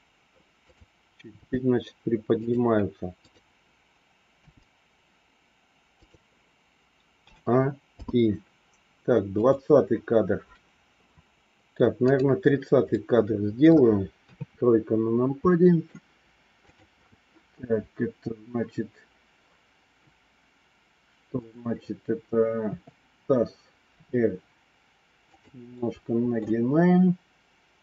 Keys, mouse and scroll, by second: 0.6 click, 1.4 g, 4.3 g, 7.1 a, 7.8 i, 9.3 click, 11.9 click, 12.9 middle click, 14.2 KP_3, 15.4 middle click, 16.7 click, 22.5 KP_3, 23.8 r, 25.7 middle click.